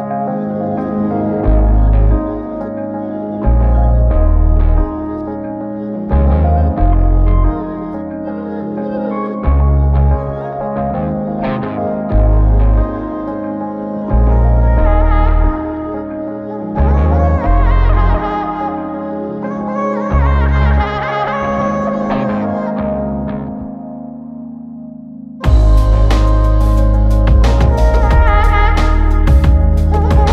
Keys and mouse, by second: 0.4 alt+click, 1.2 ctrl+click, 3.8 double click, 4.4 shift+click, 6.8 shift+l, 8.2 alt+click, 9.3 alt+click, 9.5 ctrl+alt+click, 11.8 double click, 12.6 shift+click, 12.9 shift+double click, 13.1 shift+click, 13.6 alt+click, 16.5 ctrl+alt+click, 18.4 f, 19.5 double click, 27.9 shift+click.